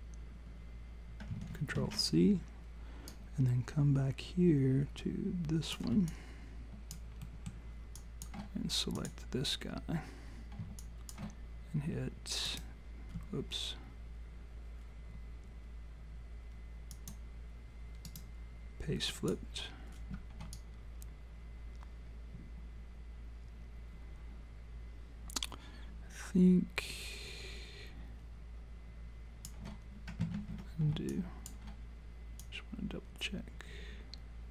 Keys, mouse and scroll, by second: 1.7 ctrl+c, 3.1 click, 7.2 alt+middle click, 8.0 alt+click, 9.0 click, 9.7-10.1 scroll down 2, 10.8 alt+click, 12.5 right click, 16.9 click, 18.0 right click, 20.5 alt+click, 30.4 ctrl+z, 31.1 alt+click, 32.4 click.